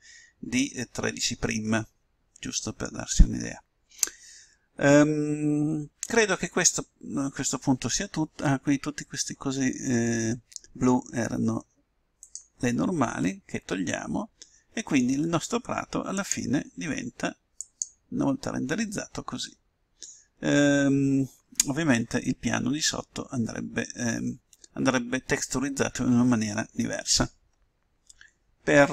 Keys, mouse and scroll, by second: 0.1-1.9 middle drag, 13.0-14.7 drag, 14.7-15.9 middle drag, 16.9-18.8 drag, 20.3-22.9 middle drag, 20.5-21.1 scroll up 1.